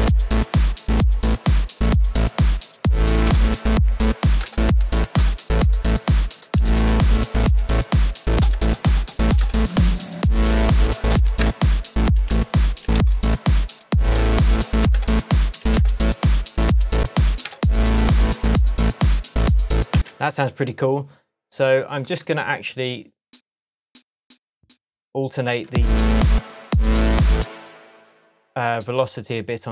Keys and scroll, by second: 3.1 Down, 3.2 Return, 4.2 Down, 4.4 Down, 5.2 Down, 6.7 Return, 8.3 Down, 8.5 Return, 9.4 Return, 10.9 Down, 11.4 Return, 12.2 Return, 12.9 Down, 14.9 Return, 17.2 Down, 17.4 Return, 19.9 space, 25.6 super+space, 26.2 space, 28.1 super+space.